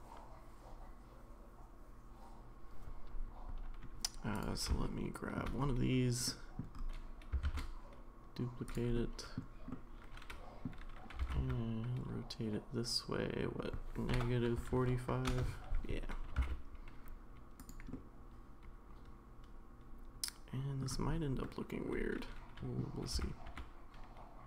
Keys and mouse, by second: 4.4 click, 4.8-5.4 shift+middle drag, 6.3-6.6 middle drag, 7.4 shift+d, 8.9-9.4 middle drag, 9.7-10.6 middle drag, 11.2 r, 16.3 g, 17.9-20.8 middle drag, 21.4-22.8 middle drag, 23.1 r.